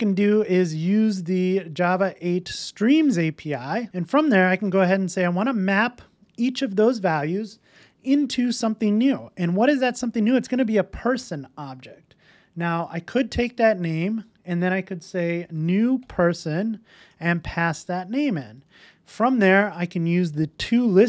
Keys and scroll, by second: 3.3 Return, 5.5 Return, 16.6 Return.